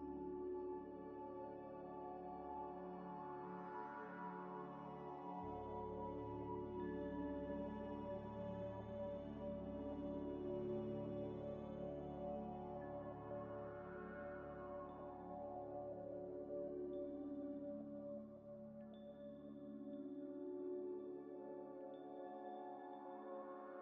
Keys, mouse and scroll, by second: 1.5 shift+d, 1.7 g, 1.9 y, 3.8 scroll down 1, 4.2 middle click, 5.2 scroll down 1, 6.0 middle click, 6.6 scroll down 1, 7.8 h, 8.1 scroll up 1, 10.0 Delete, 10.6 Delete, 11.4 scroll up 1, 11.7 scroll down 1, 12.1 m, 13.2-13.8 typing, 14.0 Return, 14.2 Return, 17.9 z, 18.3 scroll down 1, 19.2 double click, 19.8 scroll up 1, 21.4 shift+a, 21.9 shift+a, 23.2 g, 23.3 y.